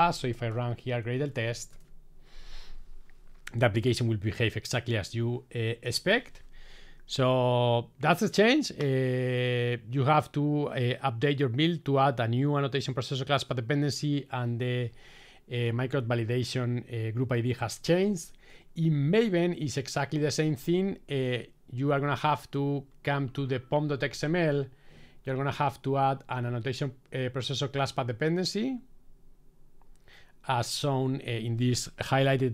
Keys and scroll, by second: 0.8 Tab.